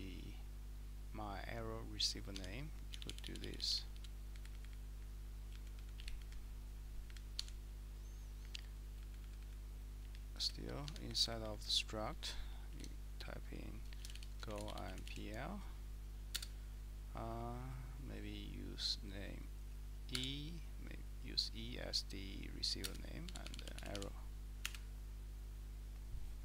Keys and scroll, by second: 2.4 Escape, 2.9 d, 3.1 d, 3.3 d, 3.4 d, 4.3 Up, 4.5 Up, 4.7 Up, 4.9 Up, 4.9-7.0 typing, 5.5 Down, 5.8 Down, 6.2 Up, 7.1 Up, 7.4 Escape, 7.7 Right, 8.4-9.4 Up, 8.4-9.2 typing, 9.2 Down, 10.0 Down, 10.8 Down, 11.1 a, 11.3 Return, 14.1 Escape, 14.7 typing, 16.4 space, 20.2 e, 23.0-24.4 typing, 24.7 Return.